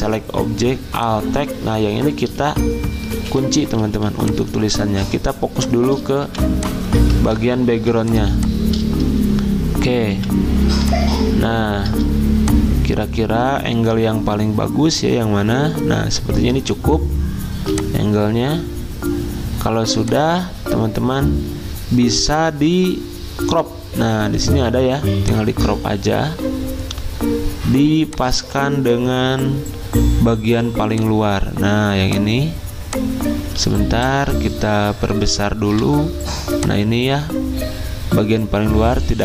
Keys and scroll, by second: 3.2 ctrl+2, 4.0 z, 5.5 v, 7.3 ctrl+z, 7.8 z, 10.1 v, 33.6 z, 35.7 v.